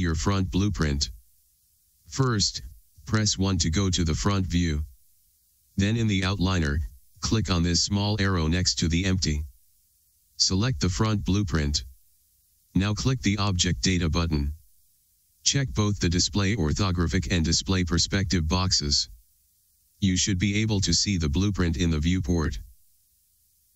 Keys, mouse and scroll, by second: 5.6 KP_1.